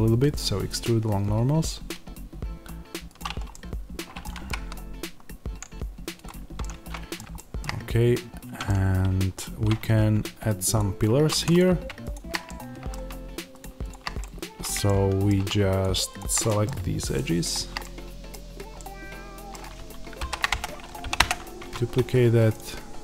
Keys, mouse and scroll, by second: 0.2 alt+e, 3.1 click, 3.4-6.1 middle drag, 4.3 g, 6.1 click, 6.5-10.7 middle drag, 7.5 shift+scroll down 1, 7.7-8.1 scroll up 1, 8.1 Tab, 9.7 Tab, 10.7 click, 11.0 2, 11.5 click, 12.3-13.5 middle drag, 13.5 shift+click, 14.1-15.7 middle drag, 15.7 shift+click, 16.3 middle click, 17.0 shift+click, 17.7-22.4 middle drag, 18.2-18.6 scroll down 1, 20.1 shift+d, 20.5 Return, 21.1 p, 21.1 Return, 21.5 Tab, 22.4 click.